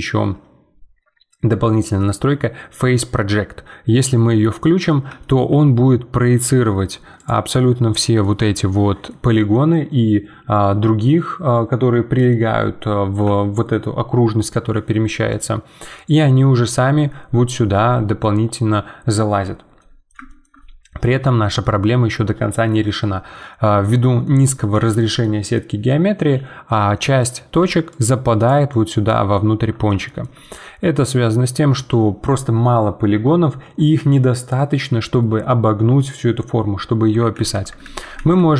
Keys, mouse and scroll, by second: 4.9 middle click, 5.5 g, 7.6-12.9 middle drag, 15.3-20.6 middle drag, 20.6-21.0 scroll up 3, 21.0-27.6 middle drag, 27.6-29.1 typing, 27.9 click, 28.7 right click, 29.3-33.6 middle drag, 37.3 ctrl+z, 37.8 ctrl+z.